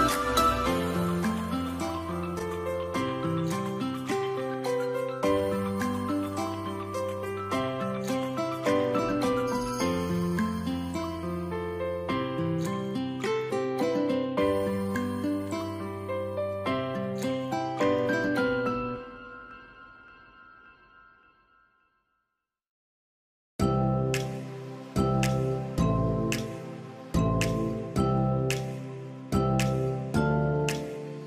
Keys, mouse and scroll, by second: 4.4-4.8 scroll down 1, 4.8 scroll up 1, 9.1-9.5 scroll down 1, 9.6 scroll up 1, 24.8 double click, 28.5 Escape.